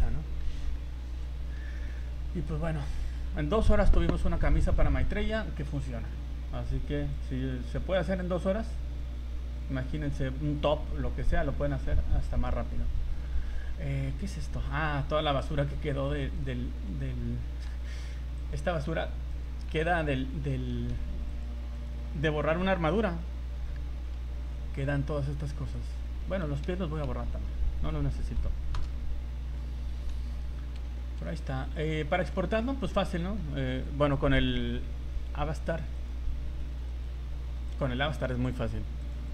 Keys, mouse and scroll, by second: 0.9 middle click, 1.4 middle click, 1.8 middle click, 7.1 click, 9.0 click, 10.1 scroll down 3, 13.7-14.3 scroll down 5, 14.3 scroll up 1, 14.6 shift+middle click, 15.0 scroll up 1, 15.4 right click, 15.6 scroll up 3, 16.4 shift+right click, 17.7 h, 18.4 right click, 18.9 h, 19.3 right click, 19.7 h, 20.9 ctrl+z, 21.3 click, 22.1 scroll down 1, 22.7 scroll down 2, 23.4 h, 23.6-24.4 scroll down 5, 24.6-24.9 scroll up 6, 25.8 right click, 26.2 shift+middle click, 26.7 a, 27.0 a, 28.3 Delete, 29.9 alt+h, 30.9 shift+middle click, 31.3-31.7 scroll up 4, 31.9 right click, 32.1 shift+middle click, 32.5 z, 32.9 middle click, 34.0 click, 36.0 right click, 36.6 z, 37.0 right click, 37.7 right click.